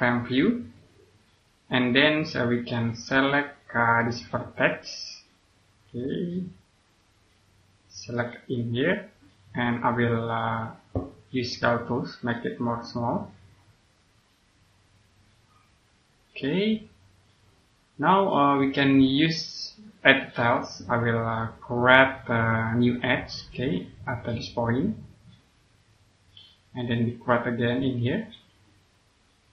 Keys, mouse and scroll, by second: 0.8-1.3 scroll down 1, 1.3 click, 3.9 right click, 4.8 click, 8.0 right click, 9.1 click, 12.1-12.7 scroll up 1, 16.6 scroll down 1, 17.2 click, 22.6-23.1 scroll up 2, 24.1 click, 27.2 scroll up 1, 28.5 click.